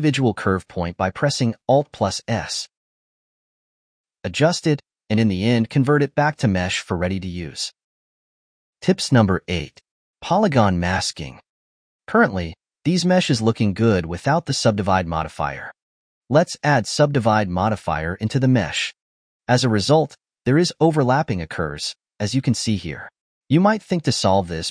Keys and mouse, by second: 0.2 alt+s, 1.6 click, 1.9 alt+s, 2.5 click, 2.7 alt+s, 3.3 click, 3.4 alt+s, 3.8 alt+s, 4.0 click, 4.1 alt+s, 4.5 alt+s, 4.6 click, 4.7 g, 5.3 ctrl+Tab, 5.8 click, 5.9-7.9 right drag, 8.9-10.4 middle drag, 11.2-13.8 ctrl+middle drag, 14.9 click, 15.5-17.2 drag, 17.7-19.4 drag, 19.6 click, 19.9-21.6 middle drag, 22.0 4, 22.3-24.0 ctrl+middle drag, 24.0 click, 24.4-24.7 middle drag.